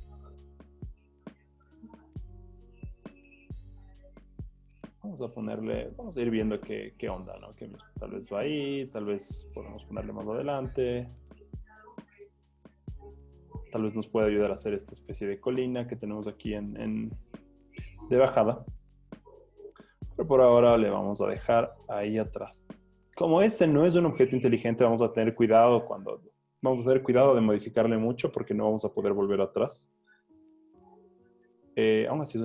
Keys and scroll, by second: 0.2 v, 14.8 super+z, 29.7 super+t.